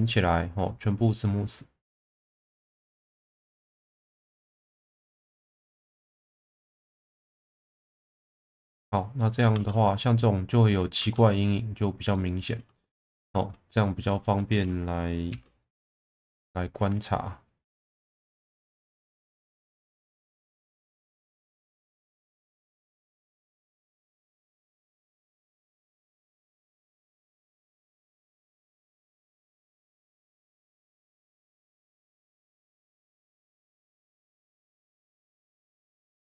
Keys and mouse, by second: 0.0-2.2 right drag, 2.5 Tab, 2.9-3.4 middle drag, 4.1 right click, 5.6 middle click, 6.5 ctrl+z, 6.9 right click, 7.8 middle drag, 8.2 Tab, 8.9 middle drag, 9.5 Tab, 11.0 Tab, 11.2 middle drag, 12.1-12.5 middle drag, 13.2 2, 13.7 click, 14.0-14.4 middle drag, 15.3 shift+v, 16.5 click, 17.9 1, 18.2 click, 18.5 shift+v, 19.3 click, 20.0 shift+v, 20.6 click, 21.4 click, 21.6 shift+v, 22.3 click, 23.2 click, 23.4 shift+v, 24.4 right click, 24.9 click, 25.2 shift+v, 25.8 click, 26.4 shift+v, 26.9 click, 27.8 click, 28.1 shift+v, 28.9 click, 29.8 shift+v, 30.5 click, 31.3 shift+v, 33.2 shift+v, 33.8 click, 34.8-35.7 middle drag, 35.9 Tab.